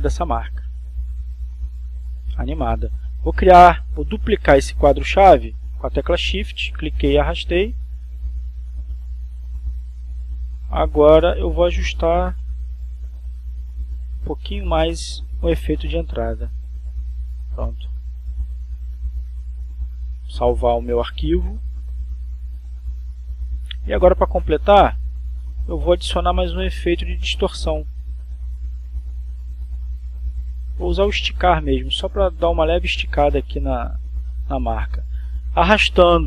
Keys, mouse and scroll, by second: 1.3-5.6 drag, 6.0 click, 8.0 shift+click, 10.8 click, 13.3 click, 14.3 Right, 16.3-21.3 drag, 21.7 click, 22.8 click, 23.8 click, 27.8 click, 28.3 right click, 34.1 click.